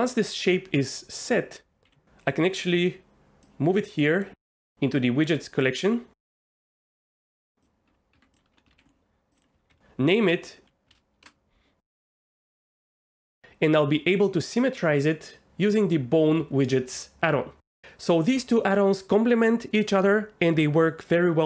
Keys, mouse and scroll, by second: 1.8 g, 7.6 click, 7.9 Tab, 8.1 Tab, 8.5 F2, 9.3 click, 9.4-11.2 drag.